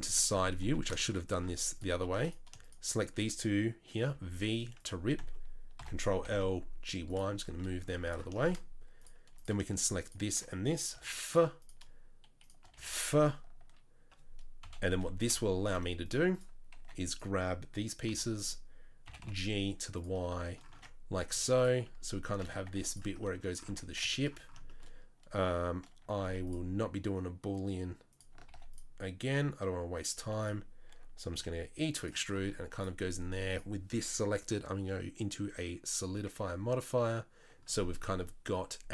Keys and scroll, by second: 0.6 2, 1.5 z, 4.0 v, 5.8 ctrl+l, 6.1 g, 10.9 f, 12.7 f, 14.6 KP_3, 14.9 KP_1, 15.3 KP_3, 15.7 z, 16.8 1, 18.1 b, 19.0 g, 20.8 Tab, 21.3 z, 22.4 Tab, 22.7 Tab, 23.7 Tab, 26.1 ctrl+r, 28.4 ctrl+r, 30.2 3, 31.3 e, 32.4 Tab.